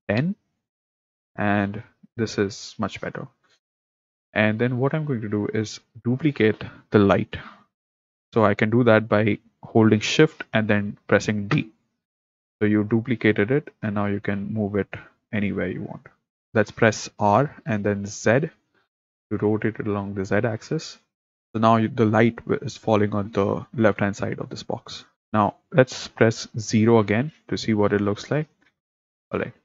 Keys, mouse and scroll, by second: 3.5 click, 4.2 click, 4.7 click, 5.9 click, 11.6 shift+d, 14.4 middle click, 16.4 r, 17.3 r, 25.2 click, 27.1 KP_0.